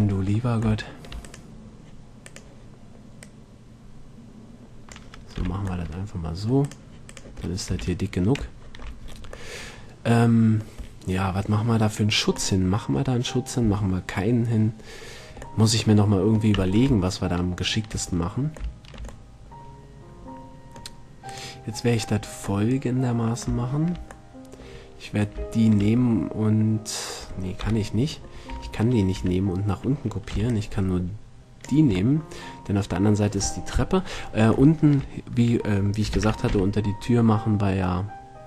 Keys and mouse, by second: 3.4-4.2 middle drag, 5.6 z, 7.6 middle click, 7.9 a, 9.3-9.8 middle drag, 9.9-10.4 middle drag, 10.7-11.2 middle drag, 11.6-12.8 middle drag, 15.2-15.8 middle drag, 21.5-22.7 right drag, 22.7-25.8 middle drag, 27.8 KP_7, 28.7 a, 29.4 Tab, 30.5 b, 34.0 KP_1, 34.2 middle click, 34.9-36.4 middle drag, 36.4 shift+d.